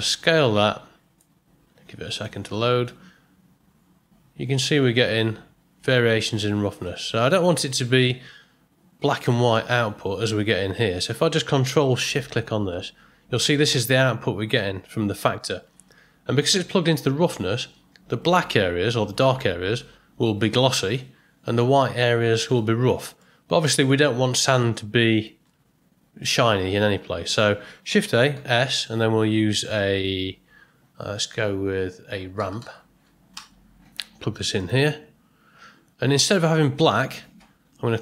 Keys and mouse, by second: 2.3-6.7 drag, 12.3 ctrl+shift+click, 23.2-23.6 middle drag, 25.1 ctrl+shift+click, 28.0 shift+a.